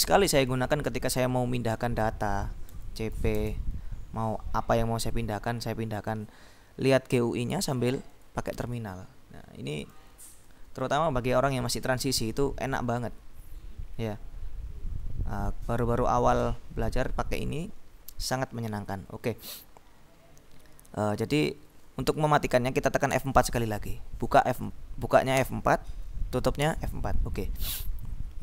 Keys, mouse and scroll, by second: 1.9-3.5 typing, 8.3-9.4 drag, 9.9 BackSpace, 18.3 click, 23.2 F4, 25.4 F4, 26.7 F4.